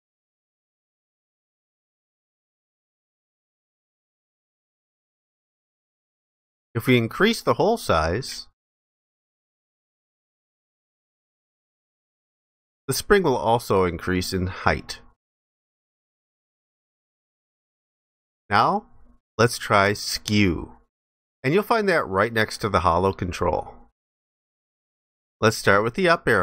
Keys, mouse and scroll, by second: 0.7 alt+click.